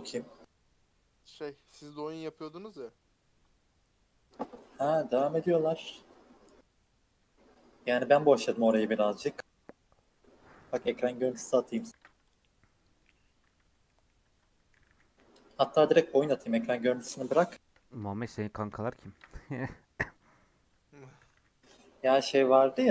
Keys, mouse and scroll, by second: 4.9 scroll down 4, 5.1 middle click, 5.4 Tab, 5.9-6.2 scroll up 3, 6.2 middle click, 6.5 Tab, 8.3 Tab, 11.9 ctrl+r, 13.5 Tab, 13.8-14.2 middle drag, 14.2 Tab, 14.7 g, 17.3-18.7 shift+middle drag, 18.7-19.1 scroll up 3, 19.1 ctrl+r, 21.2 g.